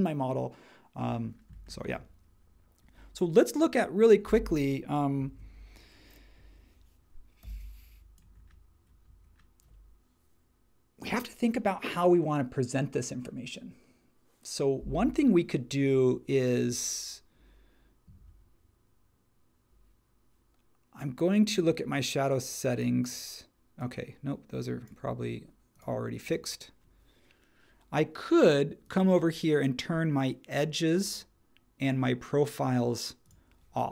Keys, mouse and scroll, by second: 5.3 super+1, 7.4 h.